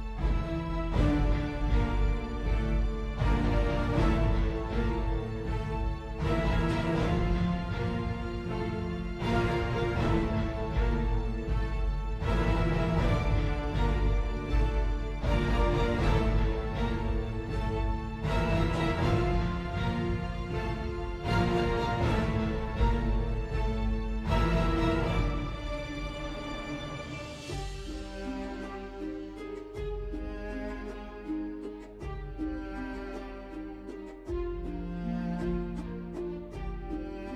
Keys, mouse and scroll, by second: 3.6 BackSpace, 4.4 ctrl+c, 4.7 ctrl+v, 34.6 0.